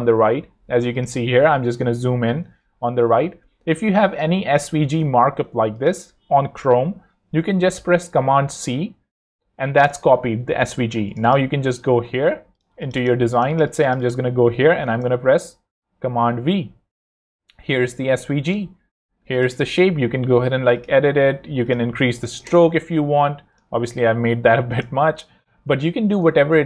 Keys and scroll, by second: 1.6 super+=, 4.4 super+-, 8.5 super+c, 9.0 super+Tab, 12.7 z, 14.8 shift+Return, 16.4 super+v, 19.3 super+z, 19.9 z, 21.9-22.7 typing, 23.8 4, 23.9 Return, 25.3 2, 26.1 Return.